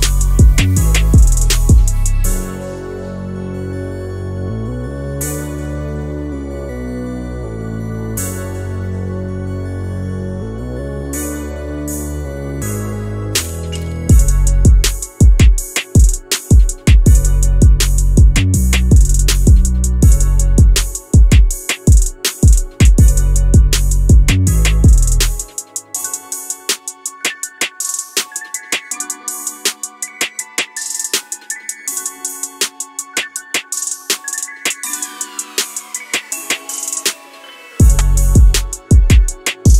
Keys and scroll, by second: 12.8 Escape, 20.0 Escape, 30.9 Escape, 31.3 2, 31.6 Return, 32.0 2, 32.2 Return, 33.8 2, 34.0 Return, 34.4 2, 34.6 Return, 35.4 Return.